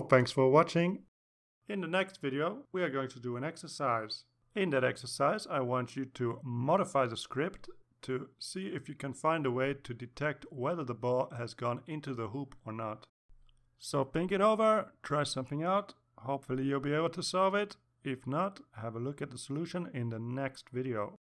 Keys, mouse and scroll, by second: 2.6 click.